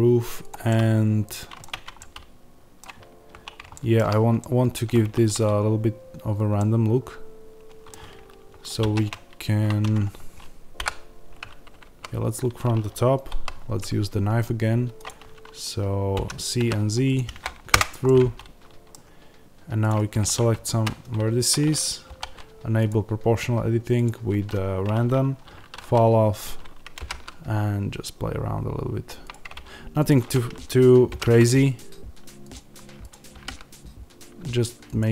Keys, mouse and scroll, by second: 0.4 click, 0.6-19.8 middle drag, 1.6 Tab, 3.2-3.6 scroll up 1, 4.9 1, 8.7 ctrl+r, 10.7 KP_7, 11.9 z, 17.7 Return, 19.8 click, 20.7 z, 23.8-29.2 drag, 26.9 g, 31.1 g, 32.4 click, 33.3 g, 34.9 click.